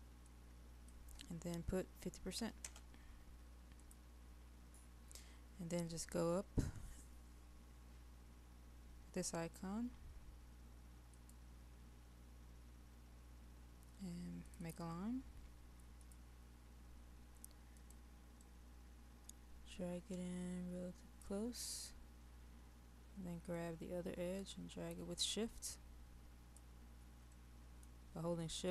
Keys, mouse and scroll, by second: 3.8 click, 16.7-17.8 scroll down 1, 17.8-21.2 drag, 23.6-26.6 drag, 27.4 middle click, 28.1-28.7 scroll up 1.